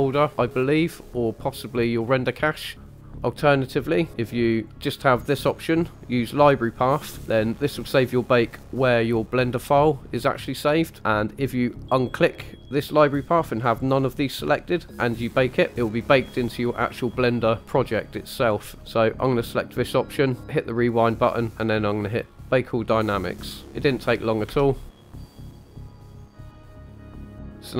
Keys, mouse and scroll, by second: 4.7 click, 11.9 click, 20.4 click, 22.3-23.1 drag, 24.5 space, 26.3-27.6 middle drag, 27.6 scroll down 3.